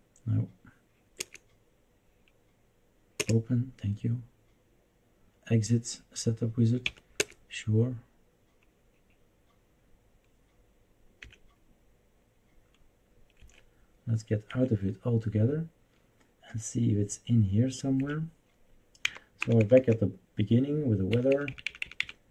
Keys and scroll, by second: 1.2 Return, 3.2 Return, 6.8 Left, 7.1 Return, 11.2 Escape, 13.4 Escape, 14.6 Escape, 18.0 Escape, 19.0 Down, 19.4 Down, 19.6 Down, 19.7 Down, 21.1 Up, 21.3 Up, 21.5 Up, 21.6 Up, 21.8 Up, 22.0 Up.